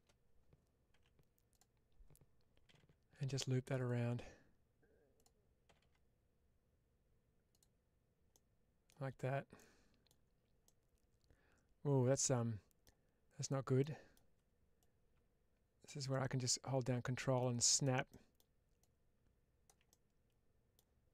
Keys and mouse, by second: 0.8 1, 1.4 click, 3.7 click, 7.4 click, 8.2 middle click, 9.4 middle click, 10.5-12.7 middle drag, 13.3 click, 13.7 middle click, 14.7-15.7 drag, 16.0-17.2 middle drag, 18.0 middle click, 18.7 click, 19.8 middle click.